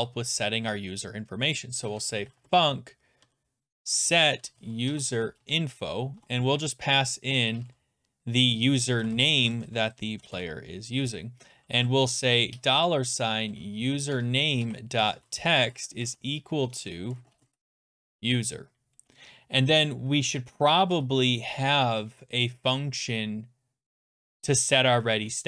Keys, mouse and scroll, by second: 1.6-10.7 typing, 12.2-21.9 typing, 14.1 Tab, 21.6 Return.